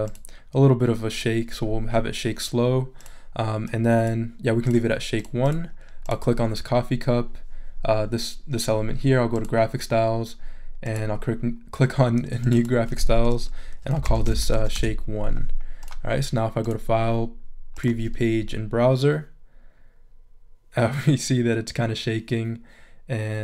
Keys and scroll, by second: 13.7-15.0 typing.